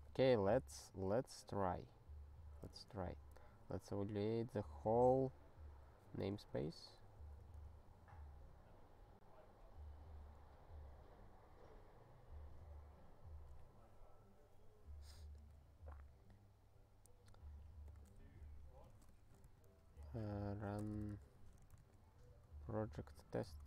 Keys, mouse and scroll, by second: 0.3 click, 2.8 ctrl+k, 17.9 click, 18.0 click, 18.4-22.0 typing, 23.2 ctrl+e.